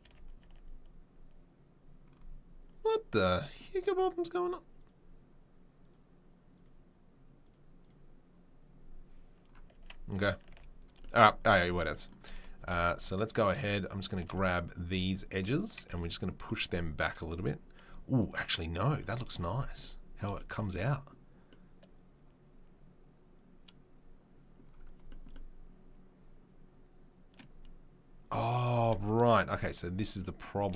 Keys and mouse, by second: 0.0 a, 0.4 Tab, 4.7 click, 4.9-5.8 middle drag, 5.8 click, 5.9 middle click, 6.5 click, 6.6 middle click, 7.4 click, 7.5 middle click, 7.8 click, 7.9-13.1 middle drag, 9.7 Tab, 10.5 z, 12.6 2, 13.1 alt+click, 13.2 alt+middle click, 14.2 middle click, 15.7-30.7 shift+middle drag, 28.5 Tab, 30.6 g.